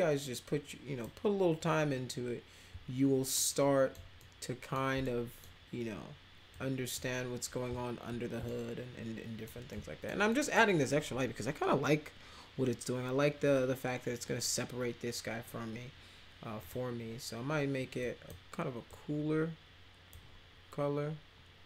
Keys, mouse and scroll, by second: 3.3 alt+middle click, 4.2 middle click, 5.0 middle click, 6.5 click, 8.4 alt+middle click, 9.7 alt+middle click, 10.3 middle click, 16.6 click, 18.0 drag, 18.9-20.1 drag.